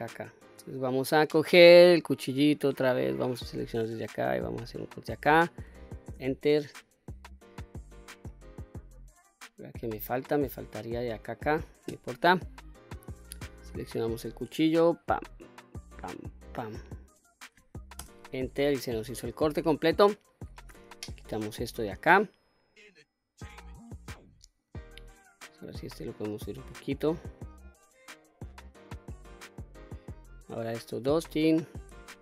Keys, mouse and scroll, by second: 1.6 click, 3.3-6.0 drag, 7.4 click, 7.9-11.0 middle drag, 13.9 click, 15.3-18.0 drag, 19.0 click, 19.7-20.3 scroll down 1, 20.3 q, 20.8 middle click, 23.0-24.2 drag, 25.1 click, 25.7-28.2 drag, 28.7 middle click, 30.4 2, 30.8 click.